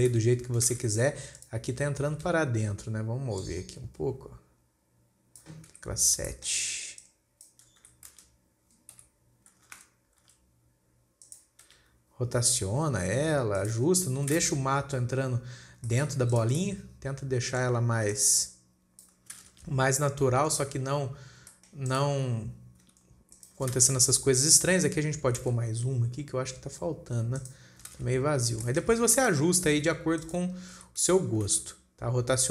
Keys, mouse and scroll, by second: 0.6 KP_1, 1.2 alt+a, 1.6 scroll up 2, 1.8 click, 2.2 scroll down 1, 3.9 click, 6.2 KP_7, 6.8 shift+middle click, 7.4 click, 8.2 r, 12.1 KP_1, 13.4 g, 14.4-14.8 scroll down 4, 14.5-15.2 middle drag, 14.8 alt+a, 15.2 scroll down 2, 15.4-16.3 scroll up 4, 15.6-16.3 middle drag, 16.3 shift+scroll up 1, 16.8 click, 17.1-18.6 middle drag, 18.6 click, 19.8 alt+a, 20.0 KP_1, 20.7-21.2 scroll down 9, 21.2 scroll up 4, 21.9-22.3 shift+middle drag, 22.3 click, 23.3 g, 24.2 alt+a, 24.9 click, 25.9 shift+d, 28.4 alt+a, 28.8 scroll up 4, 29.2-29.6 shift+middle drag, 29.6 drag, 30.2 r, 31.2 r.